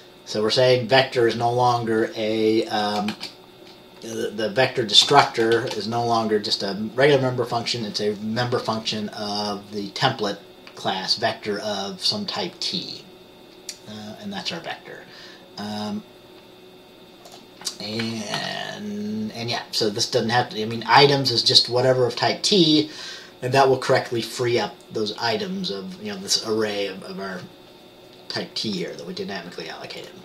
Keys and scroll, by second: 3.2 typing, 5.6 typing, 18.5 ctrl+s.